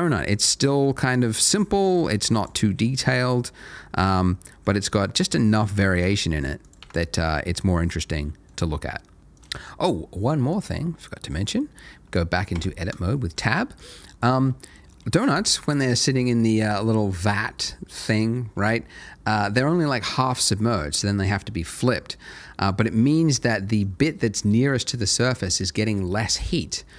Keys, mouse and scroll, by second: 0.4 middle click, 2.0 Tab, 2.3 click, 2.6 middle click, 3.0 g, 3.9 click, 4.2 middle click, 5.1 click, 5.4 middle click, 6.0 g, 6.6 click, 6.8 Tab, 7.0 Tab, 7.8 middle click, 9.2 click, 10.7 shift+middle click, 11.6 shift+scroll up 2, 12.5 Tab, 13.1 shift+middle click, 14.4 middle click, 22.5 middle click.